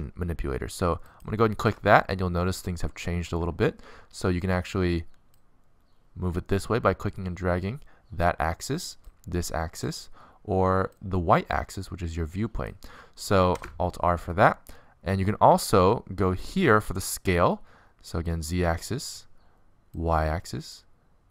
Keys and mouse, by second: 1.4-3.1 drag, 3.3-4.9 middle drag, 5.0 middle click, 7.3-8.6 middle drag, 11.3 middle click, 11.8-14.5 middle drag, 15.6 alt+r, 18.4 click, 19.1 click, 19.3 click, 20.0-21.3 middle drag.